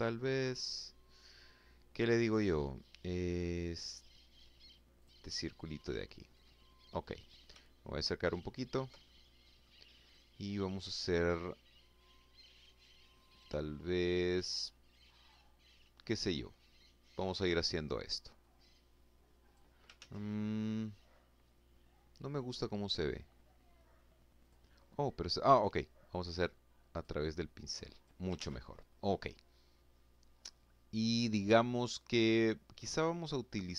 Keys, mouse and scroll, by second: 3.6 click, 4.8-5.5 scroll up 2, 6.4-6.9 ctrl+scroll up 2, 7.0-7.7 ctrl+scroll down 2, 7.7 ctrl+click, 8.0 ctrl+middle click, 17.0-18.4 drag, 18.6 ctrl+z, 21.8-22.2 scroll up 2, 23.1 click, 25.6 click, 26.3 click, 27.0 ctrl+z.